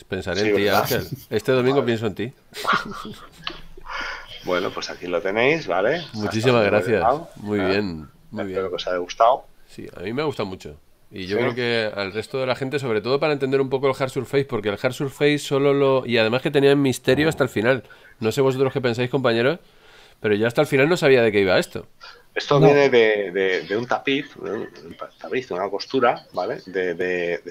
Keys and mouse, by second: 0.6 middle click, 3.6 a, 4.9 middle click, 8.3 middle click, 13.3 middle click, 23.0 middle click, 24.3 shift+middle click.